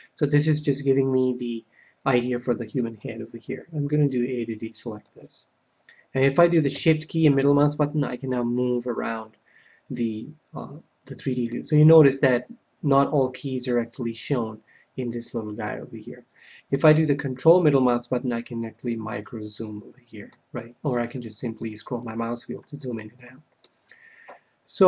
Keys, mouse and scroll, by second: 0.1-1.8 middle drag, 2.9 KP_1, 3.8 a, 4.9-6.8 middle drag, 7.2-9.1 middle drag, 17.8-19.6 middle drag, 20.7-24.8 middle drag.